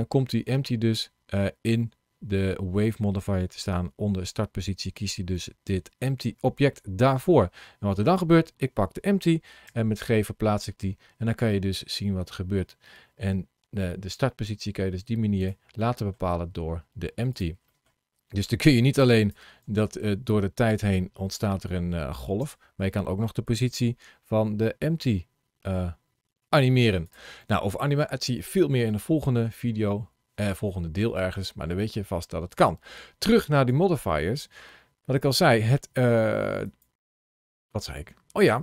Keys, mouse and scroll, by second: 0.3 ctrl+shift+a, 7.9 click, 9.5 g, 15.3 click, 15.6 middle click, 16.1 g, 17.2 click, 17.5 middle click, 19.0 click, 19.5 space, 22.3 space, 23.5 g, 26.9 click, 27.2 middle click, 33.4 click, 34.1 middle click, 36.5 click.